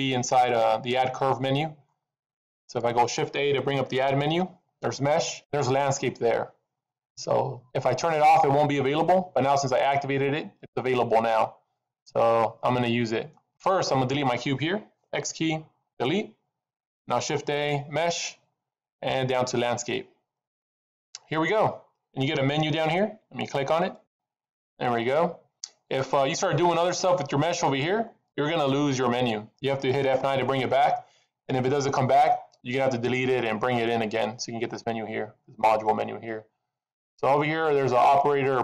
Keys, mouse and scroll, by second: 4.1 shift+a, 15.0 x, 17.0 shift+a, 23.9 click, 27.9-28.6 scroll up 6, 36.3-38.6 scroll up 1.